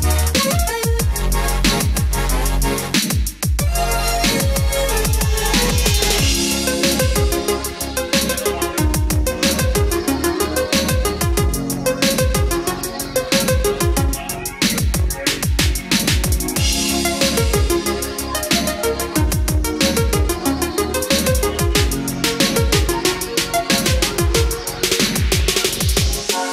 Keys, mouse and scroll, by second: 14.0-14.6 scroll up 1, 15.9-16.3 scroll down 1, 17.3-26.5 drag.